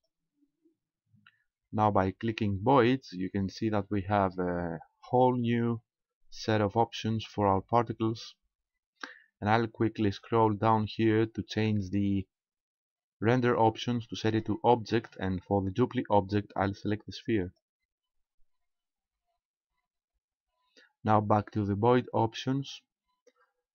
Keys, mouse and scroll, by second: 8.7-9.5 scroll down 2, 9.5-12.3 scroll down 9, 14.3 click, 16.2 click, 19.7-21.1 scroll up 4, 21.1-21.8 scroll up 2, 21.8-22.4 scroll up 2, 22.4-23.7 scroll up 6.